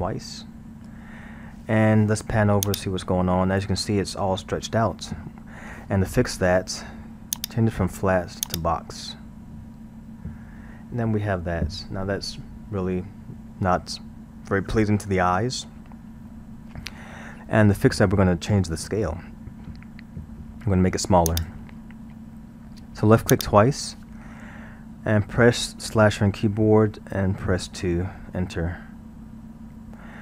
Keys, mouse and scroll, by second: 0.4 scroll, 2.7-5.7 drag, 7.3-10.4 drag, 10.4-13.2 scroll, 16.3-20.8 middle drag, 21.3-24.3 drag.